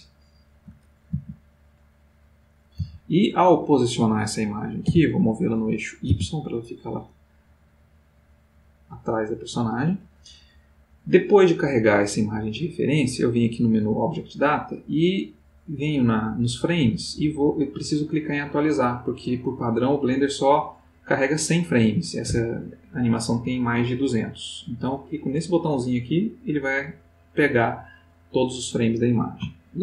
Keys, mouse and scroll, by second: 1.7 s, 2.7 click, 2.9 g, 9.1 click, 12.9 click, 25.4 click, 29.6 ctrl+middle click.